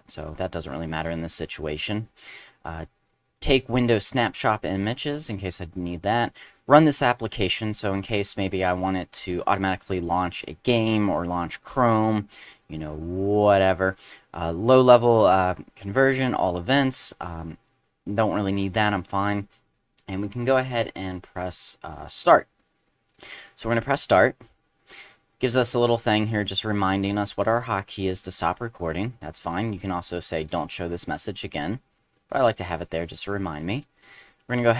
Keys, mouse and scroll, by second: 24.0 click, 30.4 click, 31.2 click, 33.7 click.